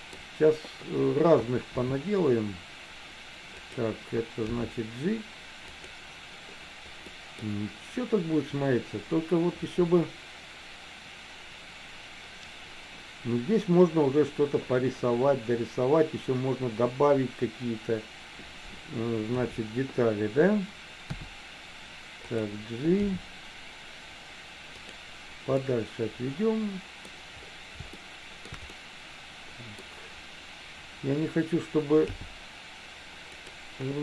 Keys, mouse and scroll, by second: 1.9 s, 4.7 g, 7.1 middle click, 19.4 KP_7, 21.3 r, 23.3 g, 25.8-27.1 middle drag, 28.3 shift+middle click, 28.8 scroll up 1, 28.9-30.0 middle drag, 32.2 g.